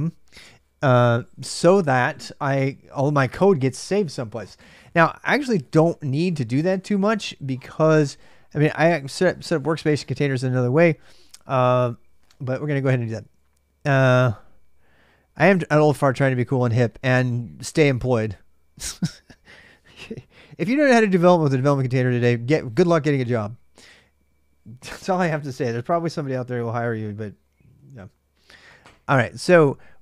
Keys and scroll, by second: 15.3-16.2 typing, 29.9-30.0 typing.